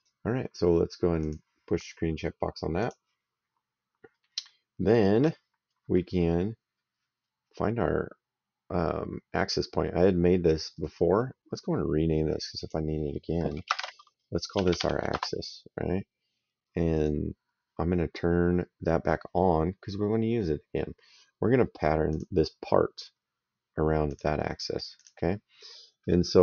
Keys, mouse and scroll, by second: 1.1 click, 2.7 click, 4.3 middle click, 10.6 right click, 12.4 click, 13.6-15.2 typing, 16.8 click, 20.0 middle click, 22.0 click, 24.0 click.